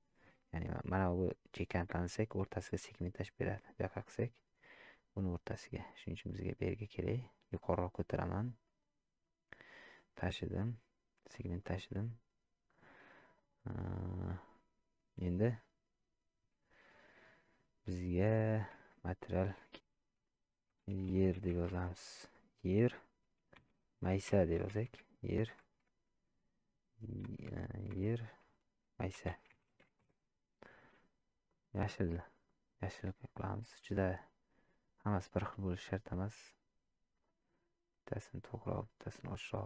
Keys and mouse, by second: 11.8 shift+middle click, 13.3-14.4 drag, 19.8-30.8 drag.